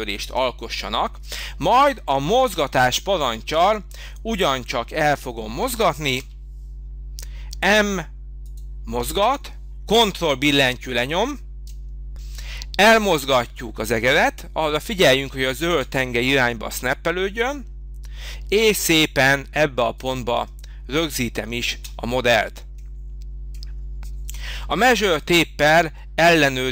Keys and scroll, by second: 6.2 m, 21.7 space.